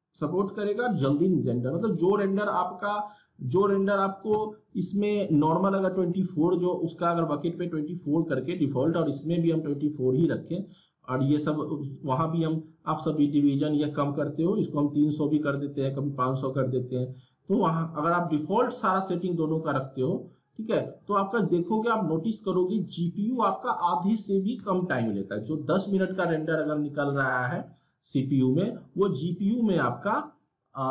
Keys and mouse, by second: 2.9 click, 7.2 click, 12.1-15.8 drag, 18.0-25.0 drag.